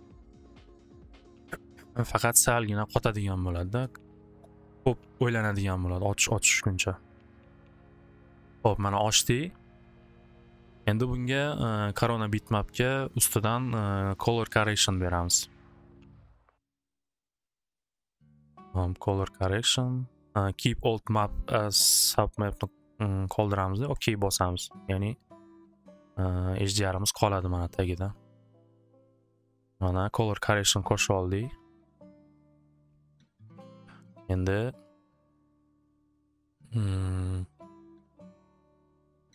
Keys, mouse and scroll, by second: 2.0 click, 4.8-6.8 drag, 8.5 click, 10.3 click, 11.6 click, 16.5 click, 19.0 click, 19.2 click, 24.0 click, 24.9-29.2 drag, 30.0 click, 31.1 click, 32.1 click, 35.5 click, 38.2 click.